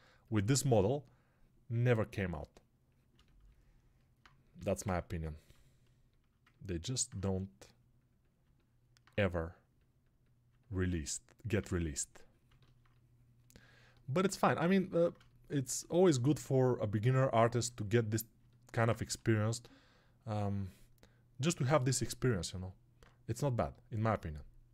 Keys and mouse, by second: 4.7 ctrl+alt+right click, 6.0-22.3 alt+shift+drag, 22.9-24.7 drag.